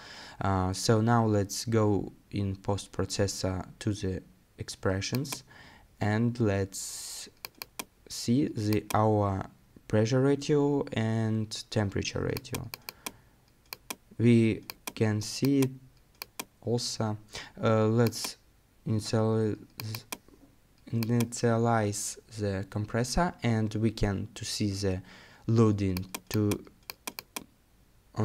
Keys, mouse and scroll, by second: 1.8 right click.